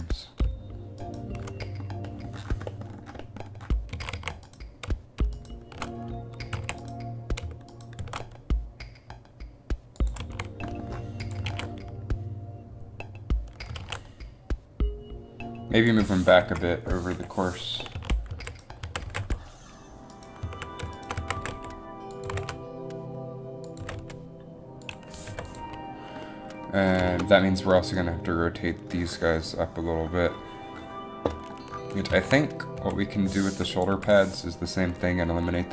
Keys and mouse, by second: 4.2 a, 4.4 a, 4.7 a, 6.7 a, 8.2 shift+d, 10.3 a, 11.6 alt+a, 12.0 alt+a, 14.0 alt+a, 16.6 Up, 17.3-19.2 typing, 18.6 right click, 20.5 z, 21.4 z, 21.5 g, 22.4 g, 23.9 g, 25.4 i, 32.3 a, 32.9 b, 34.0 Delete, 34.2 a, 34.2 b.